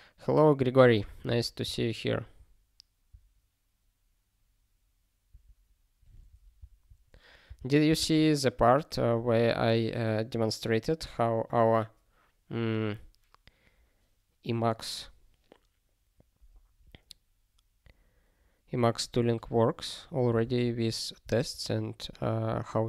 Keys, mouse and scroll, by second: 0.8 super+b, 1.3 ctrl+s, 5.3 super+b, 6.6 click, 7.4 ctrl+n, 8.1 ctrl+s, 21.2 ctrl+s, 22.3 scroll down 1.